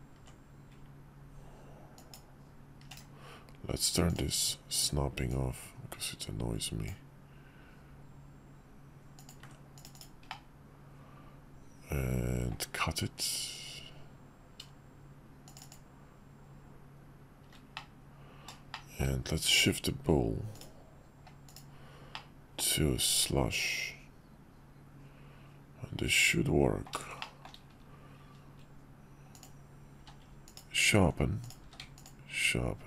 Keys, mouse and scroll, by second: 4.1-5.1 drag, 5.3-6.9 ctrl+drag, 11.5-17.1 drag, 17.8-18.5 drag, 18.7-19.0 shift+drag, 19.5 q, 22.1-22.5 drag, 22.5-26.9 middle drag, 27.2 shift+middle click, 30.0 q, 31.4 click, 31.6 q.